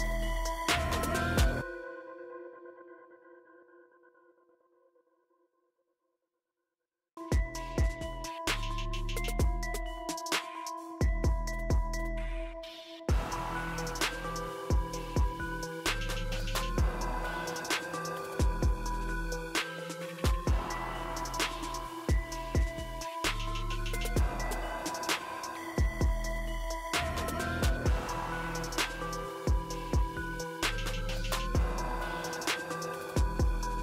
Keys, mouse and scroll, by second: 1.6-2.7 drag, 2.7 typing, 5.0-6.3 drag, 9.3-11.4 drag, 13.5-14.6 drag, 13.5 typing, 16.1-17.1 drag, 20.8 click, 20.8 typing, 22.2-22.8 drag, 26.6 scroll down 1, 28.3-29.4 drag, 30.1 typing, 30.4 ctrl+j, 31.1-31.8 click, 32.0 ctrl+t, 32.7 click.